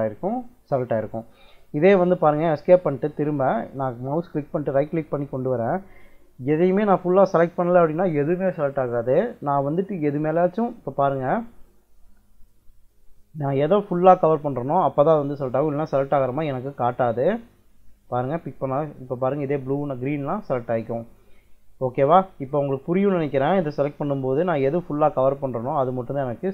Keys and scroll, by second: 1.4 Escape, 11.3 Escape, 18.7 Escape, 21.2 Escape.